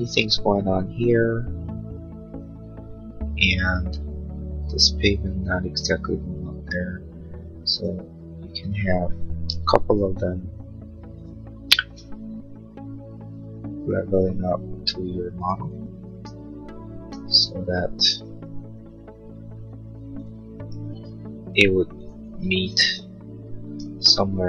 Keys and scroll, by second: 9.4 m.